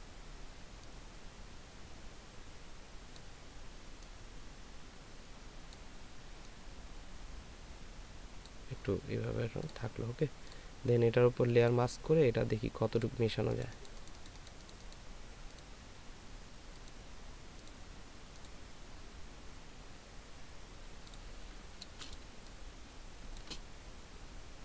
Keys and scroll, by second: 22.3 ctrl+alt+space.